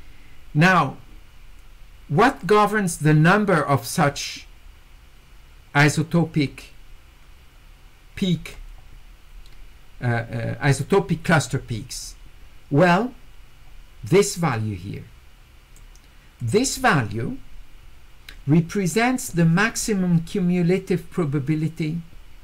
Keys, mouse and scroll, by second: 2.9-8.5 drag, 14.5-15.8 drag, 16.4 click.